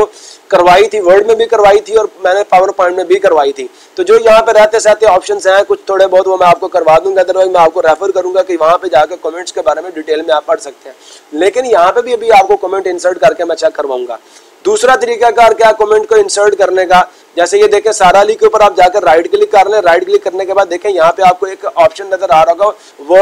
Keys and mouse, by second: 17.6 click, 18.4 right click.